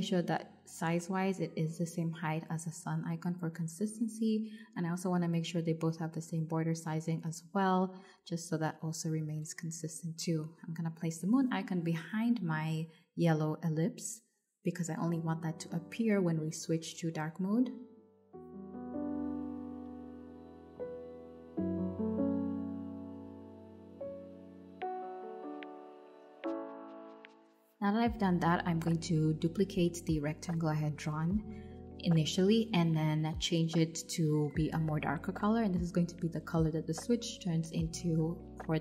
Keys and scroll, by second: 5.6 Escape, 8.3 4, 8.5 Return, 16.4 super+z, 22.8 super+[, 26.3 super+c, 26.7 super+v, 32.7 shift+Up.